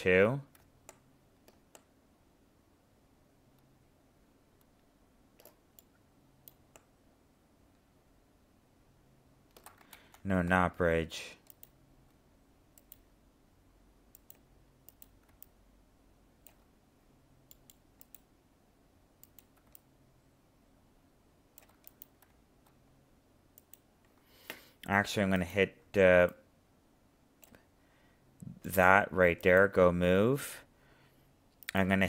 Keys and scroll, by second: 9.9 ctrl+z.